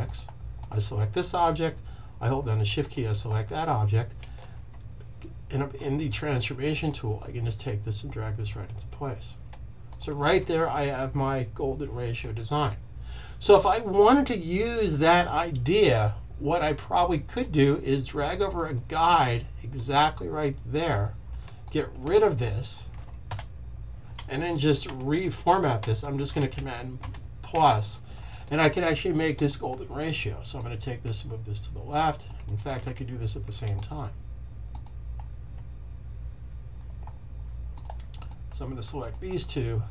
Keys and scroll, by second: 26.9 super+=, 32.6 z.